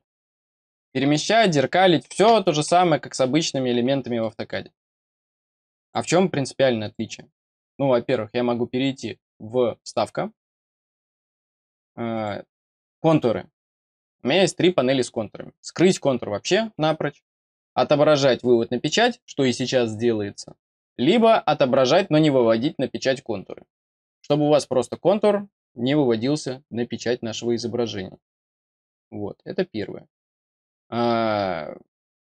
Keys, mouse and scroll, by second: 4.1 middle click, 5.2 click, 5.7 click, 6.7 click, 7.3 click, 9.7 click, 12.0 click.